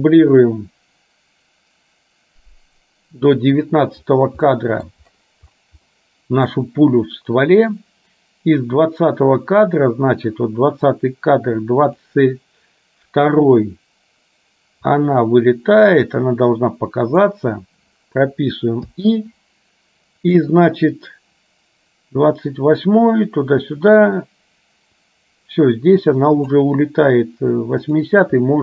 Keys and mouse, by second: 4.6 middle click, 6.0 middle click, 10.9-12.1 drag, 15.1-17.3 drag, 20.8-26.6 drag, 27.9 click.